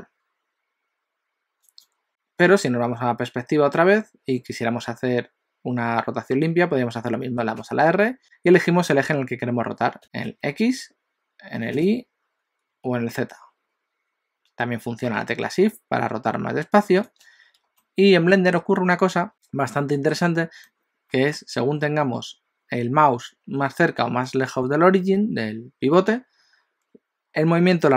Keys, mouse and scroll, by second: 3.7-6.7 scroll down 1, 7.5 r, 10.0 r, 17.9 shift+middle click, 19.3 middle click.